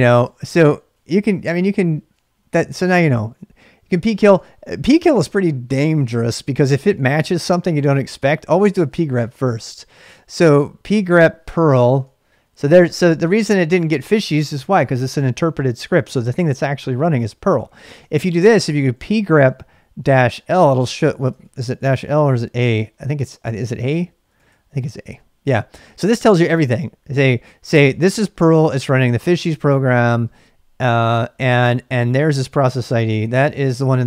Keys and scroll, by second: 0.0-2.7 typing, 7.9-9.5 typing, 11.1-12.1 typing, 17.8-22.7 typing, 20.4 Return, 24.0-24.9 typing.